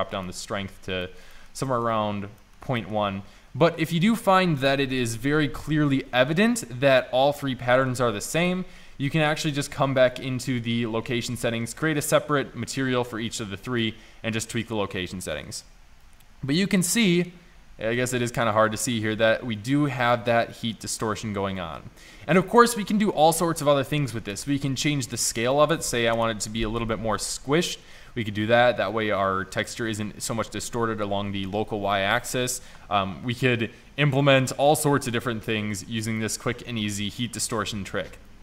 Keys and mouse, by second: 11.6 middle click, 22.2-22.6 middle drag, 25.5 click, 33.3-34.5 middle drag.